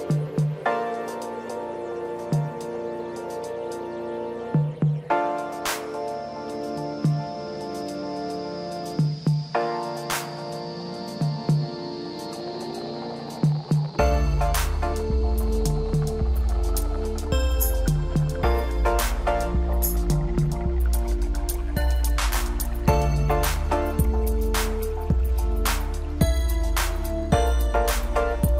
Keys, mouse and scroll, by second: 0.8 shift+click, 1.4 middle click, 2.1 shift+click, 2.9-4.5 middle drag, 4.5-4.8 scroll down 2, 4.8 middle click, 5.6-5.9 scroll up 1, 5.9-7.3 middle drag, 7.3 click, 8.1 click, 9.2 click, 9.6 scroll up 1, 10.2 scroll down 2, 10.5-13.3 middle drag, 13.3-13.9 scroll up 2, 13.9-14.3 scroll up 4, 14.9 scroll down 3, 15.6 middle click, 16.1-17.0 scroll up 1, 17.0 KP_7, 19.5 click, 20.7 click, 23.7-24.8 drag, 25.0 scroll up 3, 25.3 scroll down 3, 25.5 middle click, 26.4 scroll down 4, 26.6-28.1 middle drag, 28.1 click.